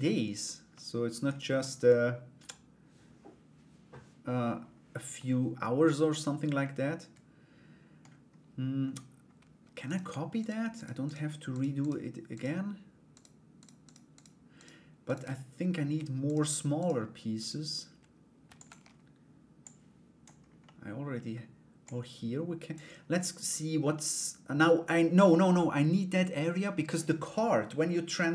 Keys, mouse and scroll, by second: 0.3 middle click, 1.2-4.0 middle drag, 4.7 middle click, 6.2-7.6 middle drag, 9.4 right click, 10.0 shift+right click, 10.3 shift+right click, 10.6 shift+right click, 11.1 shift+right click, 11.4 shift+right click, 11.9 shift+right click, 12.7 shift+right click, 13.4 shift+right click, 13.7 shift+right click, 14.1 shift+right click, 14.6 shift+right click, 15.8 shift+right click, 16.4 shift+right click, 17.0 shift+right click, 18.0 shift+d, 19.2 click, 20.2 middle click, 21.4 click.